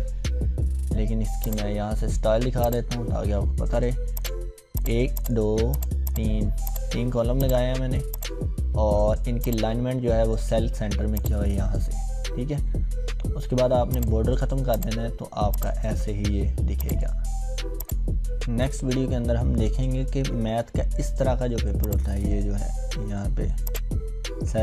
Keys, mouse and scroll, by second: 1.4 click, 3.2-4.2 ctrl+scroll up 2, 4.2-11.1 drag, 7.7-8.0 click, 9.8-10.7 drag, 13.9 click, 18.4-19.4 scroll up 1, 21.9-23.4 drag.